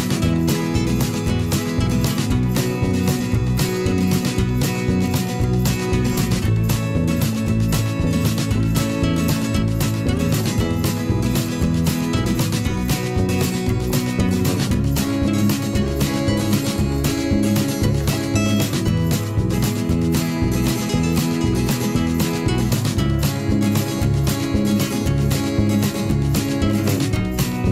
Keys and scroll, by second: 0.1 shift+Right, 0.3 shift+Left, 0.4 shift+Up, 1.5-2.5 typing, 3.5 m, 4.4 v, 4.8 shift+m, 5.6 v, 8.5 shift+Left, 8.6 shift+Up, 9.4 Left, 9.6 Up, 11.0 shift+Down, 16.6 g, 19.2 v, 23.8 ctrl+z.